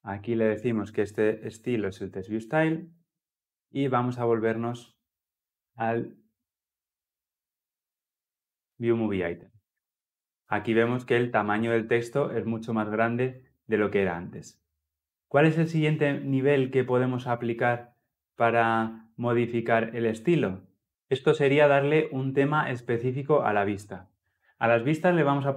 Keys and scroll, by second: 1.6 Return.